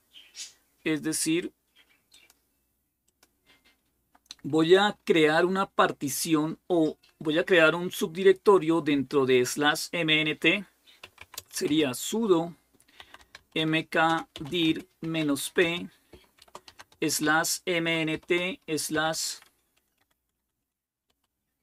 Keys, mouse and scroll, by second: 1.9-6.3 drag, 10.7-21.6 typing.